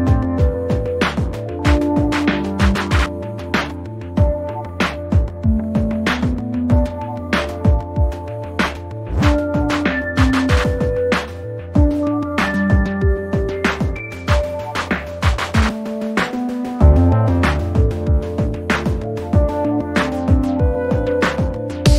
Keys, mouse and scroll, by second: 0.2 shift+click, 1.6 click, 3.0 click, 7.2 click, 9.8 shift+click, 14.6 shift+click, 19.0 shift+click, 21.8 shift+click.